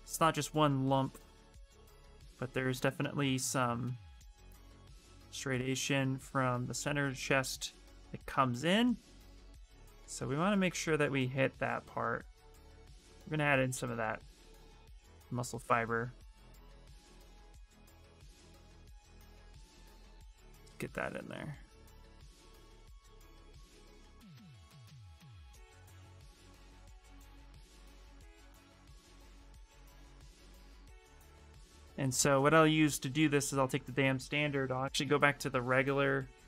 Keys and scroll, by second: 3.3 space, 12.7 s, 34.1-35.3 typing.